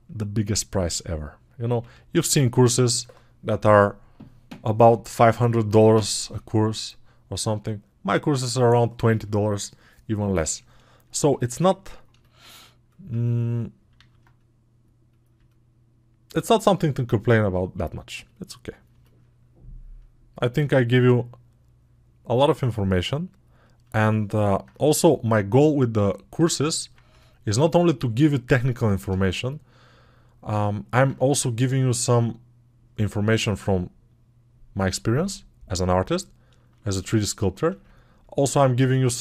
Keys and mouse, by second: 10.9-19.0 alt+drag, 19.0-22.3 alt+right drag, 22.3-24.5 alt+drag, 37.3-39.2 ctrl+alt+drag.